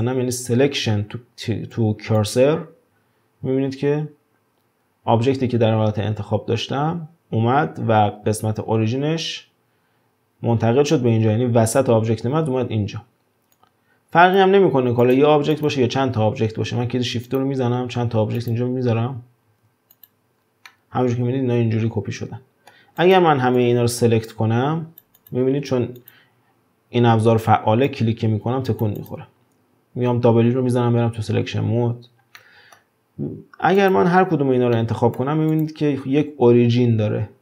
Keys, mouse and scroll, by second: 13.6-14.6 drag, 14.6-15.0 scroll down 3, 15.0 click, 15.5 click, 16.6 shift+d, 18.0 shift+d, 19.5 shift+d, 20.4 scroll down 3, 20.6-22.8 middle drag, 22.8 scroll up 1, 23.0 drag, 23.6 click, 25.2 click, 26.0 click, 27.9 click, 29.0 click, 30.6 w, 32.4-33.2 middle drag, 33.2-33.8 scroll up 1, 33.8 click, 34.3-34.6 scroll up 2, 34.7-35.5 shift+middle drag, 35.5 click.